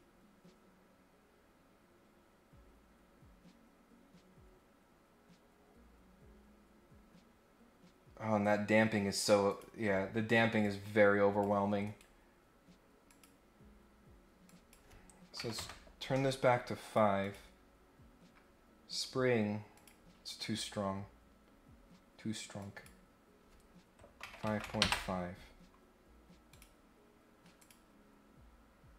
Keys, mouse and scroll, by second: 9.4 click, 10.6 click, 11.8 right click, 13.0 click, 14.4 click, 16.8 click, 17.2 click, 18.3 scroll up 1, 18.9 right click, 19.7 click, 22.6 click, 26.4 click, 27.6 click.